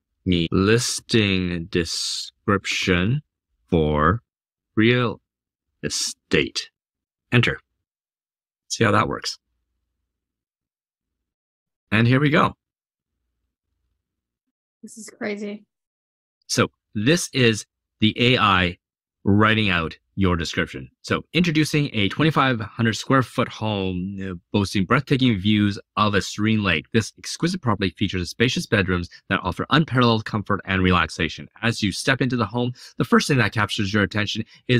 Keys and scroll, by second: 0.0-6.3 typing, 6.8 Return.